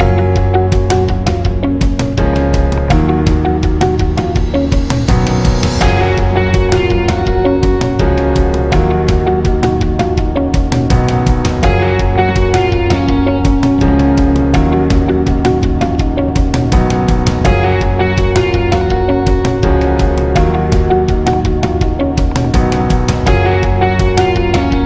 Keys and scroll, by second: 12.2 alt+shift+?, 13.8 ctrl+alt+õ, 14.2 alt+shift+x, 14.2 alt+shift+ğ, 15.0 alt+shift+ý, 15.4 alt+shift+ù, 15.7 alt+shift+ê, 15.8 alt+shift+į, 16.2 alt+shift+á, 16.3 alt+shift+ù, 16.4 alt+shift+ħ, 16.8 alt+shift+è, 16.8 alt+shift+ļ, 17.5 alt+shift+?.